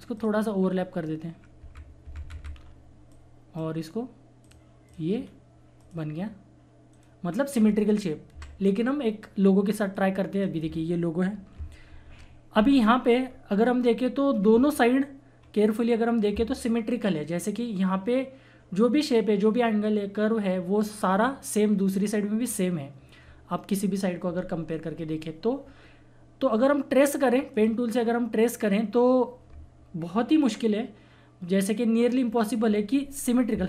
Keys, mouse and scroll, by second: 0.1 click, 1.6 Up, 2.5 scroll down 1, 3.1-4.4 drag, 5.1 scroll up 1, 5.7 click, 6.9 right click, 7.6 typing, 7.6-8.3 scroll down 1, 8.3 Delete, 9.9-11.9 drag, 11.9 shift+F4, 12.6 scroll up 1, 15.1 scroll down 1, 15.3-17.5 scroll up 2, 21.6-22.4 scroll down 1, 24.2-24.5 scroll up 1, 27.5 click.